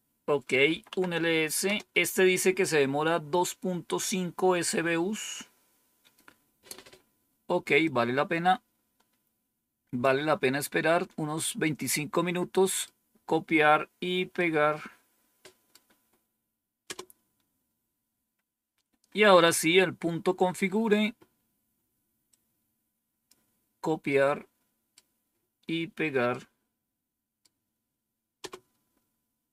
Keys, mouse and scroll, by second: 0.3-1.5 typing, 7.7-10.0 drag, 11.5-12.7 right drag, 14.2-15.6 right drag, 16.7 Return, 19.6-20.9 scroll down 1, 22.2-23.2 drag, 24.0 right click, 26.2-27.3 right drag, 28.3 Return.